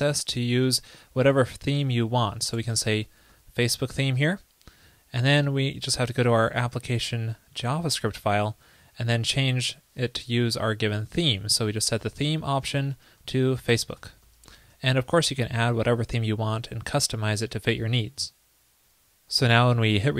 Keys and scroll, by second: 3.9 super+s, 10.5 super+Right, 15.4 super+s.